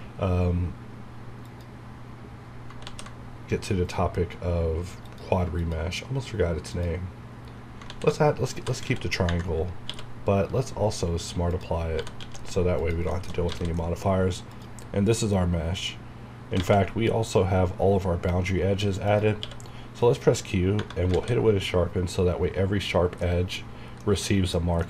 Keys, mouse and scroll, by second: 1.5 click, 2.9 ctrl+z, 5.1 click, 7.9 ctrl+z, 8.4-9.3 typing, 11.5 click, 11.7-12.7 typing, 12.8 click, 13.1 shift+middle click, 13.8 middle click, 14.2 scroll up 1, 14.5 click, 15.0 scroll up 1, 18.3 scroll down 1, 18.6 scroll up 1, 19.1 click, 19.4 q, 20.0 click, 21.3 alt+a, 21.5 scroll down 1, 23.2 middle click, 24.1-24.8 middle drag.